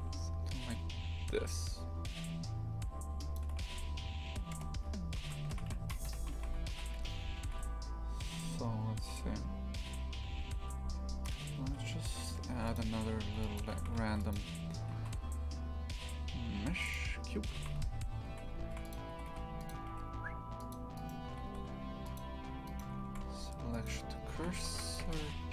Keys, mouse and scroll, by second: 4.5 KP_0, 5.5 shift+f, 6.0 a, 6.3 shift+f, 13.2 Tab, 13.5 click, 13.7 shift+f, 16.9 shift+a, 17.5 shift+f, 19.1 g, 20.9-22.1 right drag, 22.1 shift+s, 22.6-23.8 right drag, 23.8 shift+s, 24.3 shift+f, 25.0 Tab, 25.3 a.